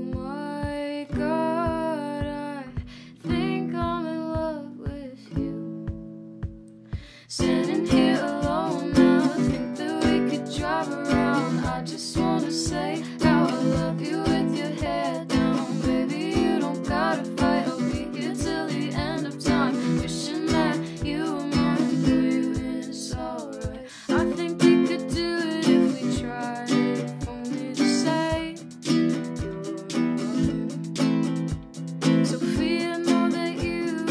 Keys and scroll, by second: 10.5 Return, 10.7 ctrl+alt+shift+c, 15.9 ctrl+alt+shift+y, 23.7 p, 33.9 ctrl+k.